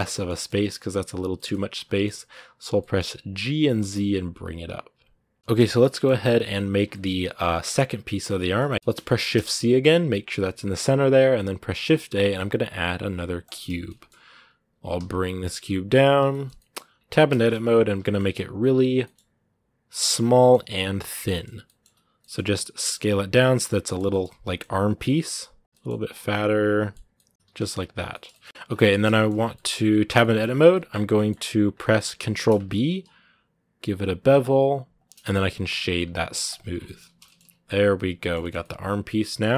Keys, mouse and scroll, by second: 0.6 scroll up 1, 1.1-3.2 middle drag, 3.2 g, 5.4-6.6 shift+middle drag, 6.6 scroll down 1, 6.7-9.1 shift+middle drag, 9.1 shift+c, 13.7 shift+middle click, 14.6 g, 16.1 shift+middle click, 16.7 scroll up 1, 16.9 Tab, 17.1 shift+middle click, 17.8 s, 19.9 scroll up 2, 20.1 s, 20.8 middle click, 21.6 right click, 22.0 middle click, 22.3 a, 23.5 middle click, 24.2 s, 24.8 scroll up 2, 25.1 s, 25.6 middle click, 25.6 s, 26.1-27.3 middle drag, 27.3 g, 27.8 scroll down 1, 27.9 shift+middle click, 28.4 scroll up 2, 28.7 shift+middle click, 29.2 scroll down 3, 29.3 middle click, 29.9 Tab, 30.0 middle click, 30.3 scroll up 2, 30.5 middle click, 31.1-31.6 scroll up 2, 31.6 middle click, 32.1 ctrl+b, 36.5 scroll down 2, 36.6 middle click, 36.8 a, 37.0 shift+middle click, 37.5 scroll down 2, 37.7-39.4 middle drag, 39.4 scroll up 1.